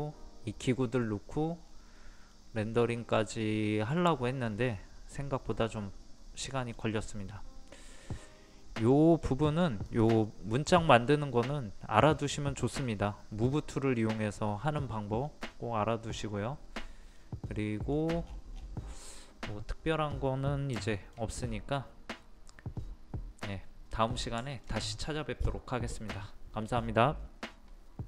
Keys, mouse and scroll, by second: 1.6-2.3 scroll up 1, 2.3 middle click, 3.2 scroll up 1, 3.8-7.2 middle drag, 7.2-8.9 middle drag, 8.9 scroll down 1, 9.8 click, 10.2 middle click, 11.0 scroll up 1, 15.2 scroll down 1, 17.2 middle click, 18.0 scroll down 1, 19.0-20.3 middle drag, 20.3 middle click, 20.8 shift+middle click, 21.4 scroll up 1, 21.7-24.3 middle drag.